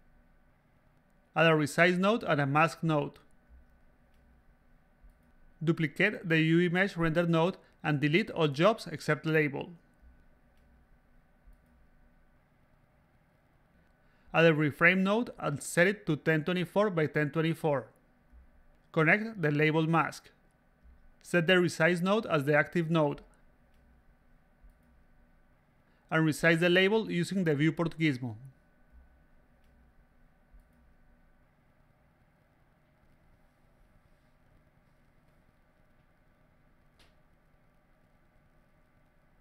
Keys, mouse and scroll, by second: 0.2 click, 1.7 click, 3.6 click, 4.5 click, 6.1 a, 7.0 s, 7.1-8.3 drag, 8.4 a, 8.4 click, 9.5 click, 10.2 click, 11.4 click, 12.3-12.8 drag, 13.2 click, 13.5 click, 14.8 click, 15.9-16.5 drag, 16.9 click, 16.9-18.7 typing, 19.6 click, 22.5 click, 23.1 a, 24.1-25.2 drag, 25.6 a, 25.6 click, 26.4 click, 27.7 click, 28.3 click, 28.3 a, 28.8 click, 29.4 click, 29.6 a, 29.7 click, 30.5 click, 31.3 click, 32.2 click, 33.0 click, 33.8 click, 34.8-37.2 drag, 37.3 click, 37.3 a, 37.9 click, 38.2 a, 38.3 click, 38.8 click, 39.2 click.